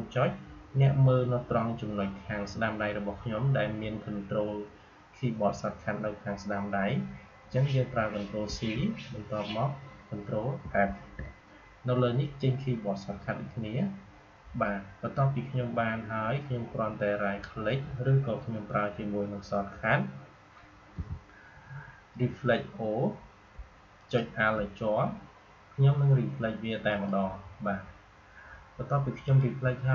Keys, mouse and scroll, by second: 20.9 o, 23.4 o, 23.9 alt+click, 26.8 click, 29.2 click.